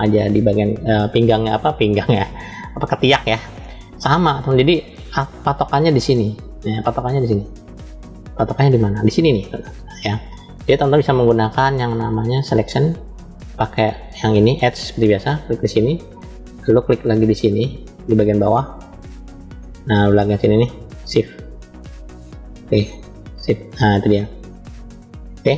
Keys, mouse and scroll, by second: 5.9-7.3 middle drag, 7.3 scroll down 2, 8.0-9.0 middle drag, 12.1 click, 15.2 click, 16.0-19.6 middle drag, 19.6-20.5 scroll down 3, 21.4 shift+click, 22.1 middle click, 23.7 shift+click, 24.3-25.5 middle drag.